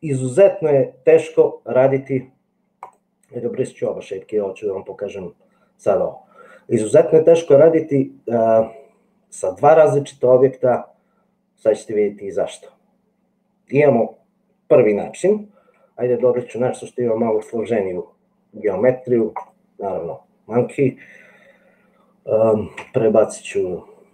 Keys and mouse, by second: 2.9 click, 3.8 click, 16.3 shift+a, 23.4 g.